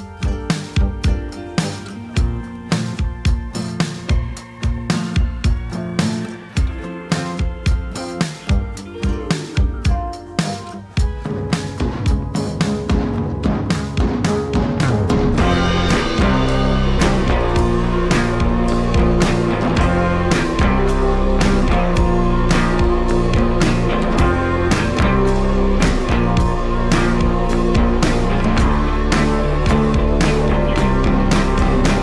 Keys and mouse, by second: 0.1 ctrl+z, 0.4 click, 0.8 middle click, 1.5 ctrl+z, 1.9 click, 2.5 click, 2.9-4.4 drag, 5.8 ctrl+click, 6.3 ctrl+z, 6.4 ctrl+click, 7.0 ctrl+z, 7.0 ctrl+click, 8.2 ctrl+click, 9.6 ctrl+i, 10.0 ctrl+z, 10.1-11.8 drag, 12.0-13.7 typing, 13.2 click, 13.7 click, 15.1 click, 15.7 click, 16.7 g, 18.2 g, 19.1 g, 20.6-23.8 typing, 21.4 ctrl+z, 22.4 click, 25.3-32.0 typing.